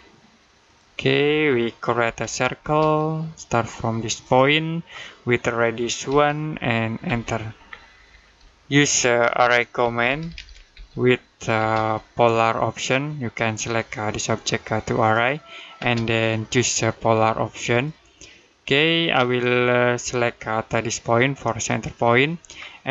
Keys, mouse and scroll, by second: 1.4 middle click, 1.9 c, 2.4 space, 4.0 click, 5.9 1, 6.9 space, 7.5-7.9 scroll down 1, 7.9 middle click, 9.6 a, 11.4 space, 13.6 click, 15.6 space, 17.5 click, 21.5 click.